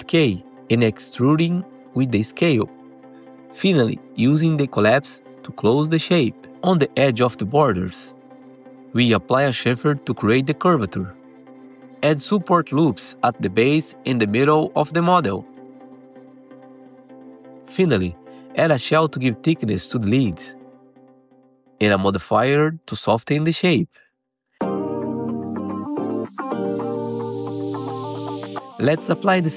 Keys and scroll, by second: 0.1 r, 4.9 2, 6.0 ctrl+shift+c, 13.0 alt+1, 15.5 alt+1, 16.8 2, 27.7 F4, 28.1 alt+q, 28.3 alt+x.